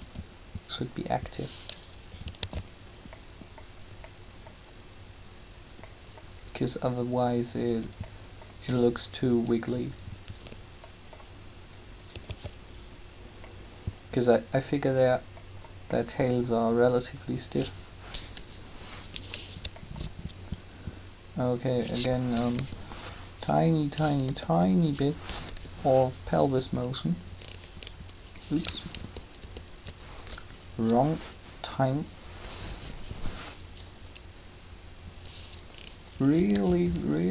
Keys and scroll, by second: 0.0 shift+r, 2.4 alt+a, 9.3 r, 12.3 alt+a, 18.1 7, 22.4 3, 28.9 ctrl+z, 32.8 3, 36.5 alt+a.